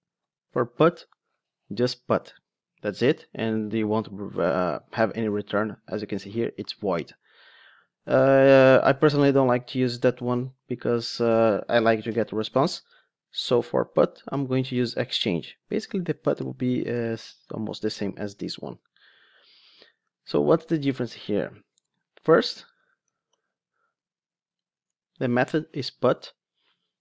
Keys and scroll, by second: 17.3 super+c, 19.0 super+v, 24.9 Return.